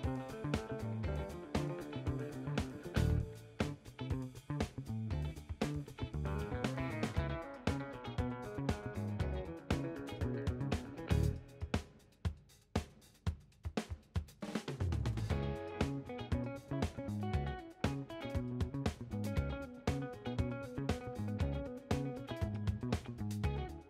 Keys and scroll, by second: 3.6-4.4 typing.